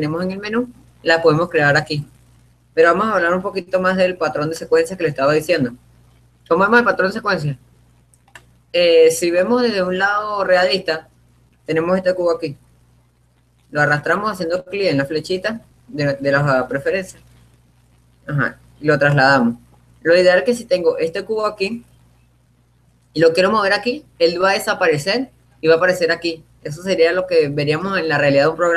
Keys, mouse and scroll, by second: 0.0 click, 0.7 click, 3.2-4.8 drag, 5.0-6.8 drag, 7.1-8.8 scroll up 1, 8.8-10.2 middle drag, 11.1-12.2 middle drag, 12.4-14.2 drag, 18.7-23.6 middle drag.